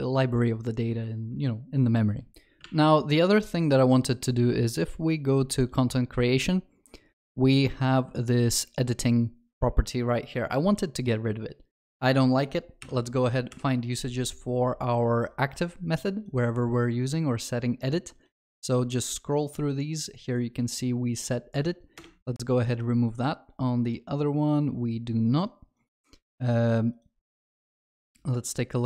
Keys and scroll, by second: 13.6 alt+F7.